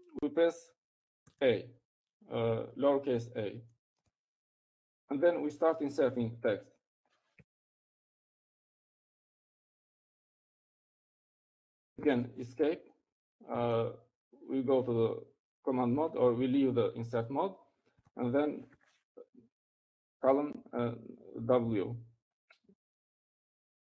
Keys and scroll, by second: 4.6 typing, 7.2 space, 8.6 typing, 9.8-13.1 typing, 14.7 Escape, 20.9-22.1 typing.